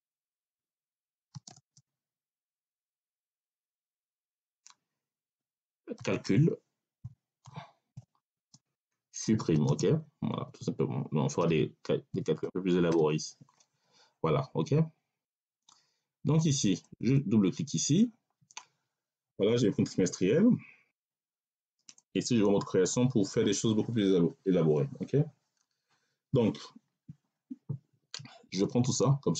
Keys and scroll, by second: 1.2 space, 1.3 6, 1.4 space, 5.8-10.2 typing, 11.3 r, 12.0 i, 12.3 m, 12.8 e.